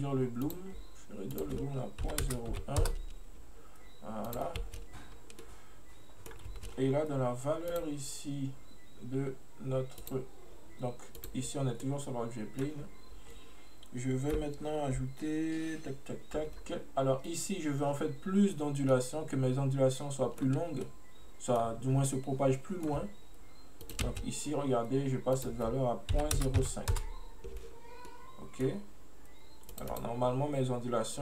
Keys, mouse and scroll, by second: 0.5-4.7 drag, 4.7 space, 5.2 scroll up 1, 5.5-6.6 middle drag, 6.6 space, 7.8 click, 10.1-11.3 drag, 11.9-14.9 middle drag, 19.0-22.0 middle drag, 22.0 scroll down 1, 22.1-23.9 middle drag, 23.9 click, 25.4-28.1 drag, 28.1-29.8 middle drag, 29.8-31.2 drag.